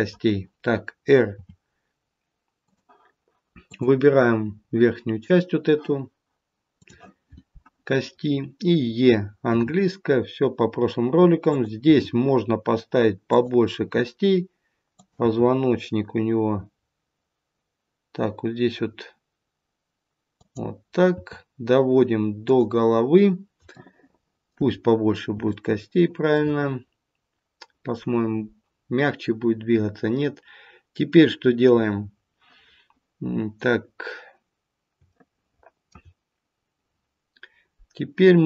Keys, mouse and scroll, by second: 1.2 r, 3.6 click, 4.5-6.6 scroll up 2, 6.6-7.2 scroll up 1, 7.9 scroll down 1, 9.5 e, 11.8 e, 15.2 e, 21.1 e, 23.7 shift+middle click, 24.8-25.5 scroll up 2, 25.5 shift+middle click, 33.2-34.9 scroll down 1, 35.0 shift+middle click.